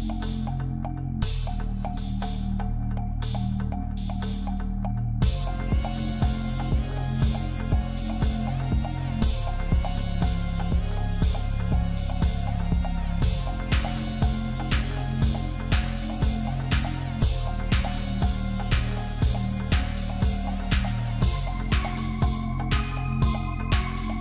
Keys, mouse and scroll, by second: 0.0 Tab, 0.2 scroll down 4, 0.3-0.9 middle drag, 0.9-1.3 right drag, 1.3 scroll down 2, 1.4-2.0 middle drag, 2.0 scroll down 1, 2.2 shift+middle click, 2.4 click, 2.6 middle drag, 2.9-3.6 scroll up 5, 3.0 shift+middle drag, 3.6-3.9 middle drag, 3.9 click, 4.5 click, 5.5-6.4 shift+middle drag, 6.4-8.6 scroll down 1, 8.6 r, 10.9 ctrl+z, 15.1-18.2 drag, 20.8-21.5 scroll down 1, 21.5-23.3 scroll down 1.